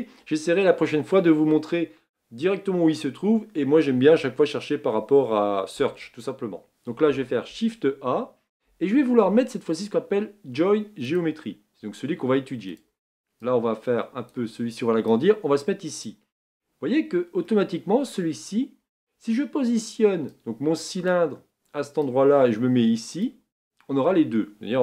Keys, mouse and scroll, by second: 16.0 click, 23.2-24.8 drag.